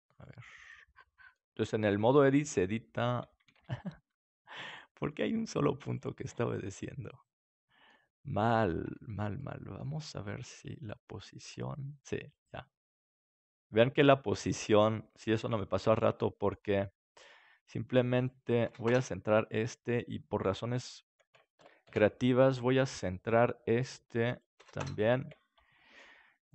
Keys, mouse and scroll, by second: 2.1-4.0 drag, 2.1 right click, 3.5 ctrl+z, 4.0 middle click, 4.6-6.5 right drag, 5.1-7.0 drag, 5.1 middle click, 6.1 ctrl+z, 7.0 middle click, 8.8 Tab, 9.5-14.2 drag, 15.3 KP_7, 16.1-18.4 middle drag, 18.4-20.3 drag, 19.4-21.1 right drag, 24.4-25.6 ctrl+alt+shift+drag, 26.4-26.5 right drag.